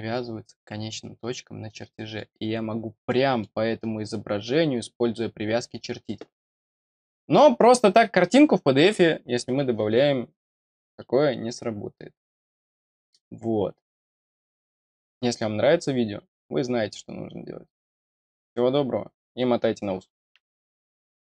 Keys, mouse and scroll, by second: 0.6 click, 1.0-1.7 scroll down 2, 1.7 middle click, 3.1 middle click, 5.9-6.4 scroll down 4.